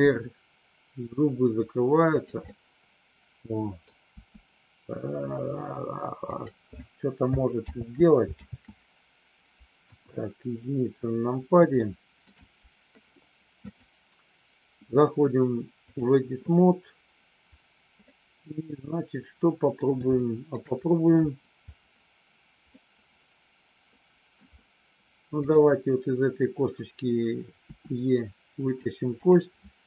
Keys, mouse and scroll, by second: 2.5-3.9 middle drag, 4.1 r, 6.3 click, 7.8 ctrl+z, 8.4 ctrl+z, 9.8 KP_1, 11.8 shift+middle click, 13.5-16.0 drag, 18.0-19.7 middle drag, 20.1 shift+middle click, 22.7-24.3 middle drag, 25.3 click, 27.7 e, 28.7 click.